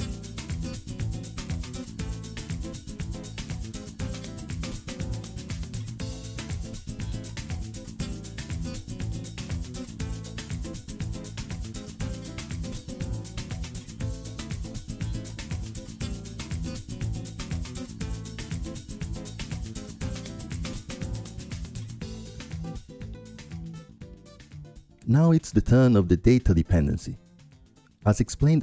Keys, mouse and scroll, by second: 0.4-5.8 drag, 2.1 ctrl+Left, 2.5 ctrl+Left, 2.6 ctrl+Left, 2.7 ctrl+Left, 3.2 ctrl+Left, 3.3 ctrl+Left, 3.6 ctrl+Left, 3.7 ctrl+Left, 3.9 ctrl+Left, 4.1 ctrl+Left, 4.3 ctrl+Left, 4.5 ctrl+Left, 4.8 ctrl+Left, 6.3 ctrl+Up, 6.4 ctrl+click, 6.6 ctrl+Up, 6.8 ctrl+Up, 6.8 ctrl+click, 7.1 ctrl+Up, 7.2 ctrl+click, 7.4 ctrl+Up, 7.6 ctrl+Up, 7.6-9.7 ctrl+drag, 7.7 ctrl+Up, 8.0 ctrl+Up, 8.2 ctrl+Up, 8.9 ctrl+Left, 9.0 ctrl+Left, 9.2 ctrl+Left, 9.3 ctrl+Left, 9.4 ctrl+Left, 9.7 ctrl+Left, 9.7 ctrl+click, 9.8 ctrl+Left, 10.0 ctrl+click, 10.0 ctrl+Left, 10.8 ctrl+Down, 10.8 ctrl+click, 11.1 ctrl+Down, 11.5 ctrl+Down, 11.6-17.3 ctrl+drag, 11.8 ctrl+Down, 12.7 ctrl+Down, 13.1 ctrl+Down, 13.7 ctrl+Down, 19.6-22.3 drag, 24.8-28.6 drag.